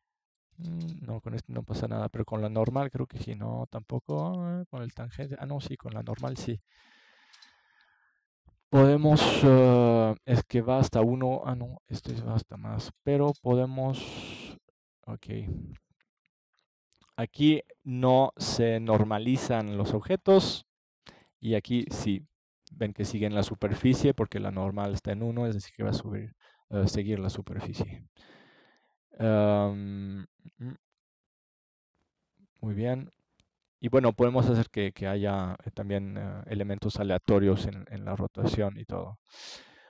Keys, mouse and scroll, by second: 2.2-4.2 middle drag, 8.0-9.2 drag, 9.2 middle click, 13.8-16.7 middle drag, 24.8-27.6 middle drag, 31.6 shift+d, 33.1 click, 37.3 alt+c.